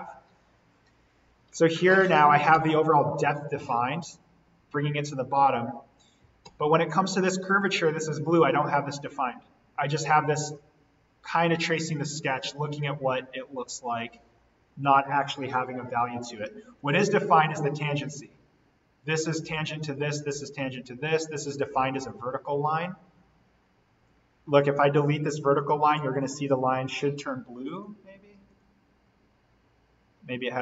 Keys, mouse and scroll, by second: 1.6-4.2 scroll down 1, 5.2-5.6 scroll down 1, 10.1-14.6 drag, 16.7 click, 20.6 scroll up 1, 21.3 click, 22.0-23.4 scroll up 1, 23.4 scroll down 1, 23.9-24.2 scroll up 1, 24.2-24.6 scroll down 1, 25.5 click, 26.9 Delete, 27.7 click, 29.5-29.9 scroll up 1.